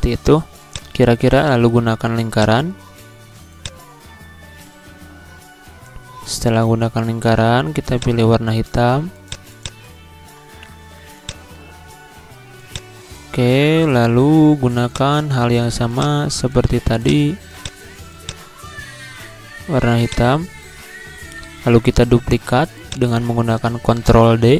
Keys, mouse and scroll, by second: 22.8 click, 24.0 ctrl+d.